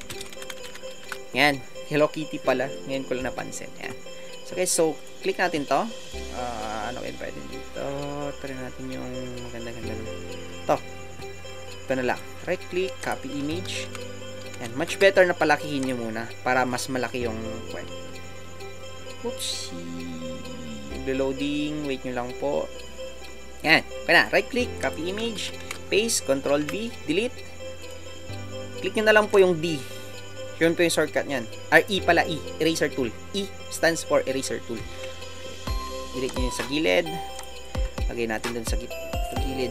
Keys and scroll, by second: 1.0 Return, 2.2 typing, 13.4 alt+Tab, 35.0 e.